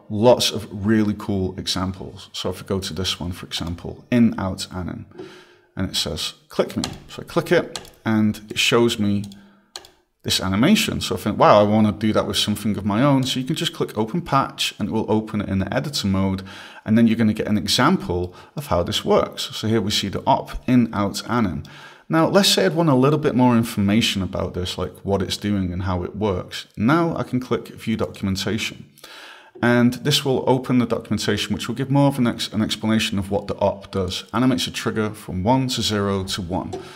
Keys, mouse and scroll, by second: 18.6 right click, 19.4-19.8 scroll, 20.3 click, 21.3 right click, 22.6 right click, 28.4 click.